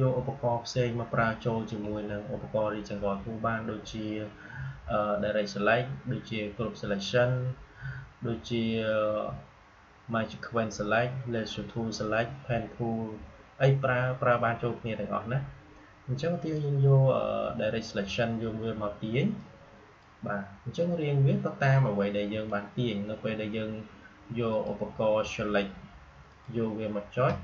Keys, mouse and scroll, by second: 19.3-21.9 drag, 21.9-27.4 drag.